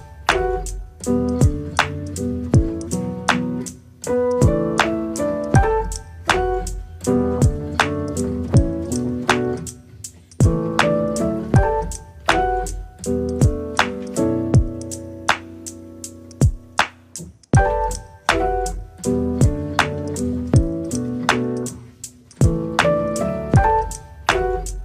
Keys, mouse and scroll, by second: 0.5 middle click, 1.3 ctrl+r, 3.1 click, 3.5 click, 3.6 click, 4.2 e, 5.2 e, 6.2 right click, 7.0 middle click, 7.7 click, 8.4 i, 9.1 e, 9.6 s, 10.2 e, 10.8 right click, 11.6 click, 11.7 click, 12.0 s, 12.5 middle click, 13.0 KP_1, 13.4 Tab, 13.6 right click, 14.3 middle click, 15.2 scroll down 2, 15.3 middle click, 16.0 KP_1, 16.6 shift+click, 17.0 click, 18.7 ctrl+z, 19.0 shift+click, 19.7 click, 20.8 scroll up 5, 21.0 shift+middle click, 21.4 shift+a, 22.1 scroll down 4, 22.3 middle click, 22.8 s.